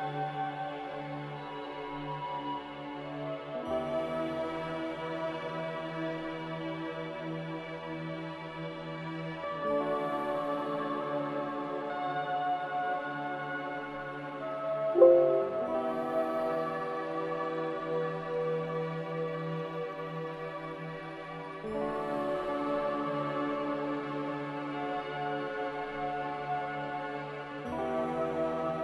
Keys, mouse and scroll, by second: 5.7 g, 11.0 z.